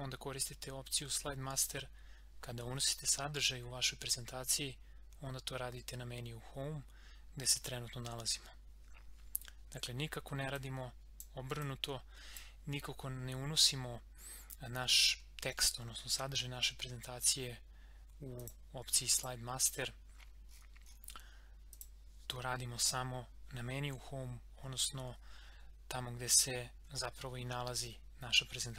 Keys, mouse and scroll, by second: 10.5-14.8 drag, 18.4 click, 20.5 scroll up 1, 21.7 click, 24.6 scroll down 1, 28.5 scroll up 1.